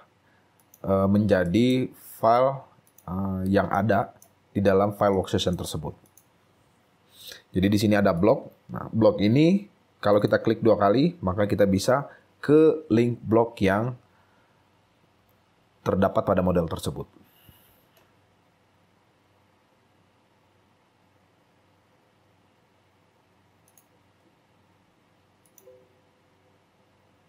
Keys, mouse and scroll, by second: 1.2 scroll down 3, 1.6 shift+right click, 3.9 shift+right click, 4.8 scroll down 3, 5.3 shift+right click, 7.5 shift+Right, 7.6-8.0 scroll up 4, 10.3 double click.